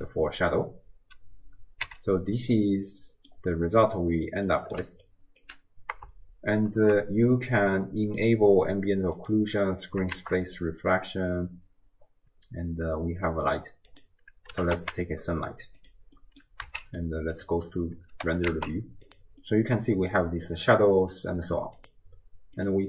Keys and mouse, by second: 1.9 n, 2.6-3.4 middle drag, 4.5 middle click, 5.1 click, 5.1 d, 5.4 d, 6.1 shift+d, 8.2 click, 9.2 click, 10.2 shift+a, 16.2 middle click, 16.2 r, 16.6 z, 18.3 r, 19.4-20.2 middle drag, 21.8 click, 22.6 click.